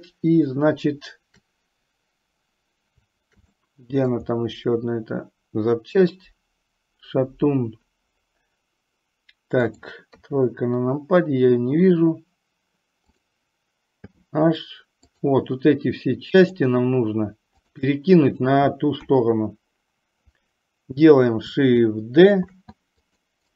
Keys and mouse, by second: 3.7 middle click, 9.8 click, 10.6 KP_3, 14.3 h, 15.3 click, 16.6 shift+click, 19.2 KP_1, 22.6 shift+d.